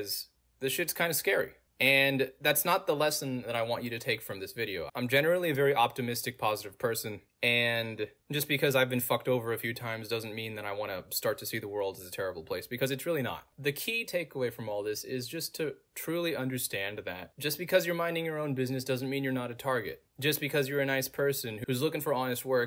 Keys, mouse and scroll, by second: 0.8-2.3 middle drag, 0.8-2.3 scroll down 2, 2.3 click, 3.6-4.7 middle drag, 3.6-4.7 scroll down 2, 7.4 click, 9.0 click, 12.2 click, 13.0 click, 14.8 Return, 16.5 click, 17.8 click, 20.6 click.